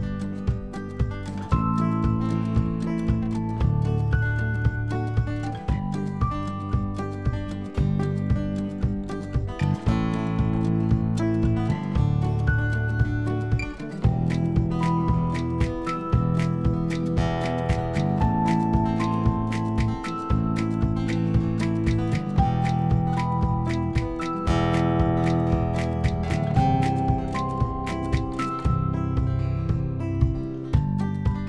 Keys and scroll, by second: 4.9 space, 13.3 x, 27.5 ctrl+z.